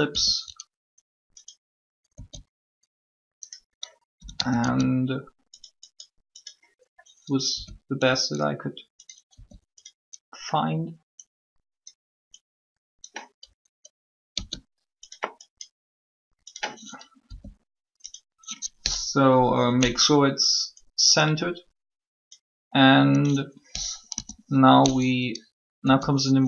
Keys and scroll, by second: 0.1 r, 2.1 s, 3.9-4.6 typing, 7.3-8.0 typing, 9.3 r, 14.2 s, 17.2 r, 23.9 3, 25.8 s.